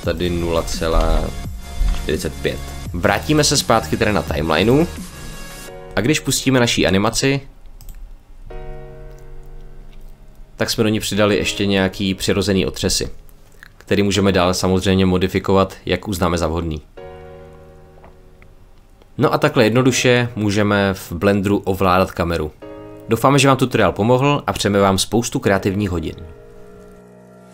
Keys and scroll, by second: 0.7 BackSpace, 1.6 4, 2.5 5.